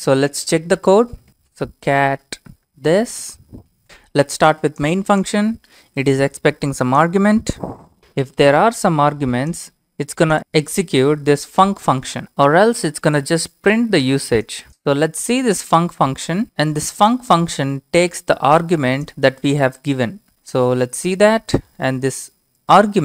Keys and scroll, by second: 1.0-1.8 typing, 3.4 ctrl+c, 3.7 ctrl+v.